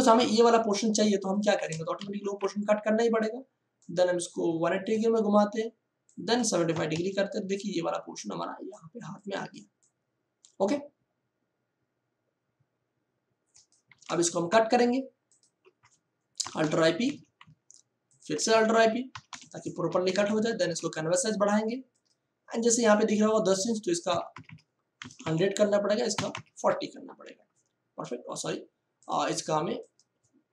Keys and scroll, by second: 0.2 ctrl+d, 1.0 space, 2.0 ctrl+t, 6.7 7, 6.9 5, 13.9 Return, 16.4 alt+i, 16.6 alt+p, 17.0 ctrl+d, 19.0 alt+i, 19.2 alt+p, 19.8 ctrl+d, 20.6 ctrl+alt+c, 24.0 1, 24.3 0, 25.8 0, 26.5 Return.